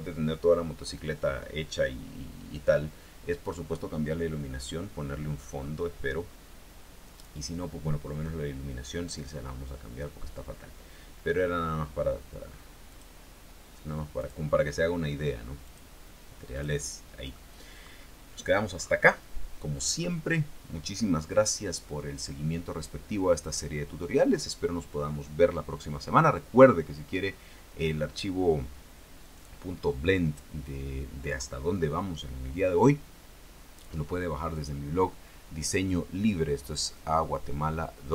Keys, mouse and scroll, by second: 5.0 scroll down 2, 5.8 scroll up 2, 6.5-8.8 scroll down 2, 9.6-11.6 middle drag, 13.0 click, 14.3 click, 15.8 click, 16.7 click, 17.1 scroll down 1, 17.5-18.8 middle drag, 18.9-19.3 scroll up 1.